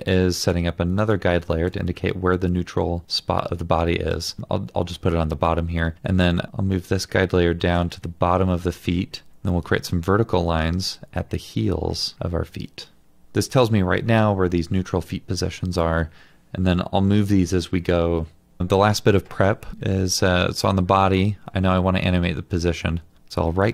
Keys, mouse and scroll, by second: 23.2 right click.